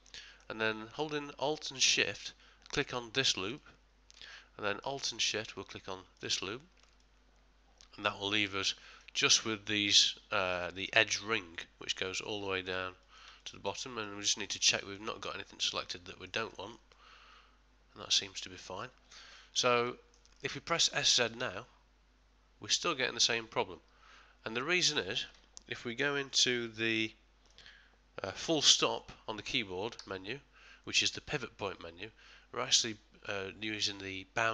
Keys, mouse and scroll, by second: 3.5 alt+shift+click, 4.3 middle click, 6.2 alt+shift+click, 7.0 middle click, 12.2 ctrl+middle click, 13.0 ctrl+middle click, 13.4 middle click, 14.1 shift+middle click, 14.4 shift+middle click, 14.8 shift+middle click, 15.3 ctrl+middle click, 15.9 middle click, 16.5 shift+middle click, 16.9 middle click, 19.4 ctrl+middle click, 19.9 shift+middle click, 20.4 middle click, 21.2 s, 26.3 middle click, 31.8 ..